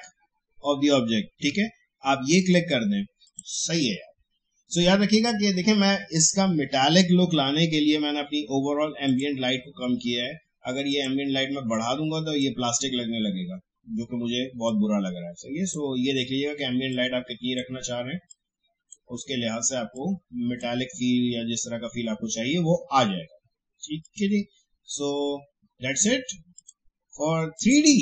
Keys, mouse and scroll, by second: 1.0 scroll down 2, 1.0 shift+Caps_Lock, 2.4 click, 9.0-14.6 drag, 14.6-23.2 drag, 24.0 click, 26.5 click.